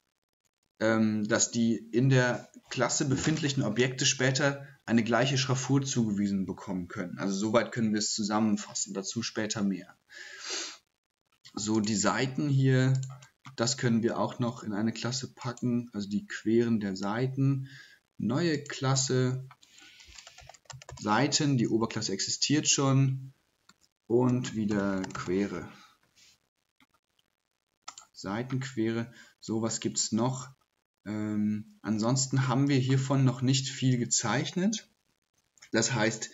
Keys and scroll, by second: 12.2 typing, 19.8-21.8 typing, 23.7-25.7 typing.